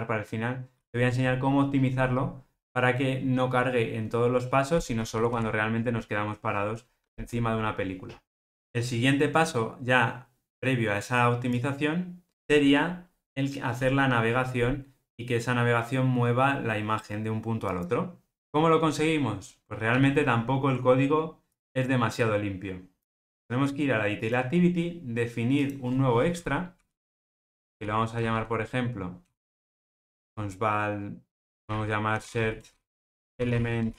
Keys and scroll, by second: 30.1 Return.